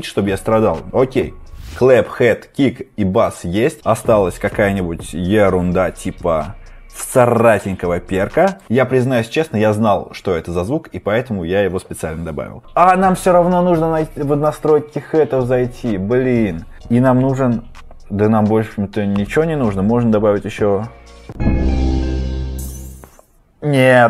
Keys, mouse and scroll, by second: 6.0-6.8 scroll, 6.0 typing, 8.5 click, 16.7 scroll, 18.5-20.2 scroll, 21.6 typing, 22.5 click.